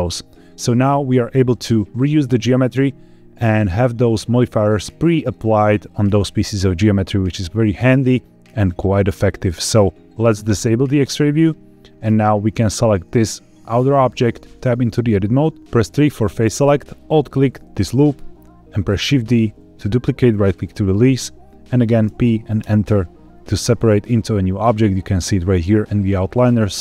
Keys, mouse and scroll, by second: 8.0 click, 10.4 click, 12.6 click, 14.4 Tab, 15.6 1, 15.8 3, 16.9 alt+click, 18.9 shift+d, 20.3-21.9 right drag, 22.0 p.